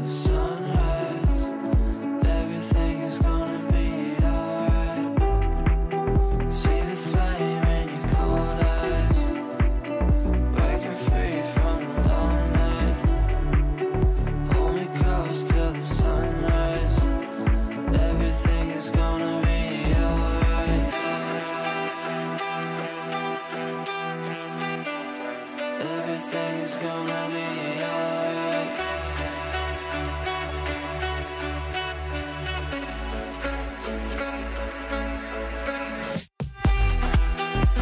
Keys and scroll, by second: 0.8 ctrl+z, 1.8 Delete.